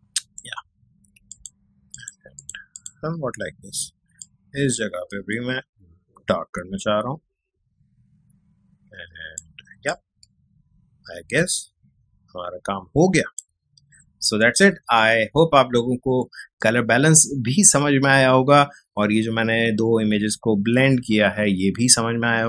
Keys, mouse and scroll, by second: 1.8 x, 1.9 click, 3.8 x, 4.2-16.0 drag.